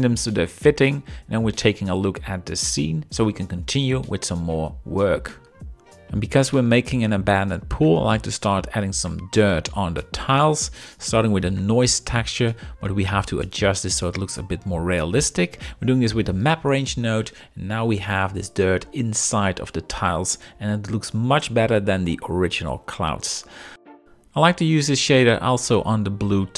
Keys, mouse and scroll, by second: 7.8 shift+middle drag, 11.8 shift+middle click, 13.5-15.0 middle drag, 13.5 scroll, 15.9 middle click, 17.1-18.4 shift+drag, 18.6-19.3 middle drag, 24.7-26.5 drag.